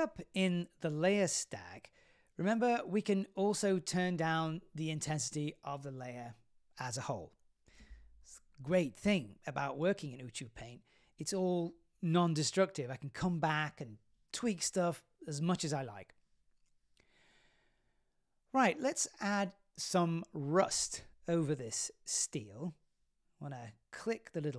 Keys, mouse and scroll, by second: 2.6 click, 6.0 click, 8.4-8.8 scroll down 3, 8.8-10.1 middle drag, 11.7 middle click, 11.7-12.1 scroll up 1, 12.2-13.2 scroll up 4, 13.2-15.3 drag, 15.7 click, 17.2-18.3 drag, 18.7-19.9 drag, 20.5-21.7 shift+drag, 22.4 click, 24.0 click.